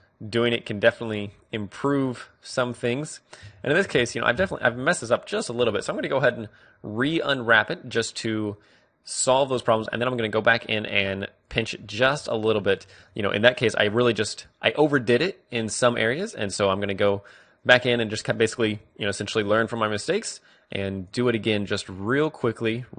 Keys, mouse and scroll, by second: 1.3-4.5 middle drag, 5.7 u, 7.0 middle click, 12.4-13.9 middle drag, 13.1-16.6 drag, 17.8-22.9 drag.